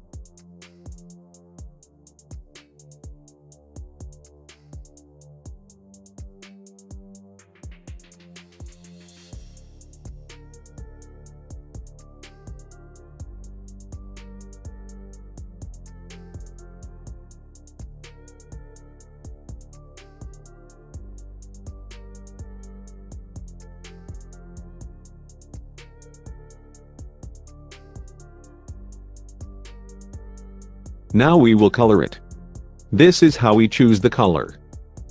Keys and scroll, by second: 7.3 F3, 19.6 F3.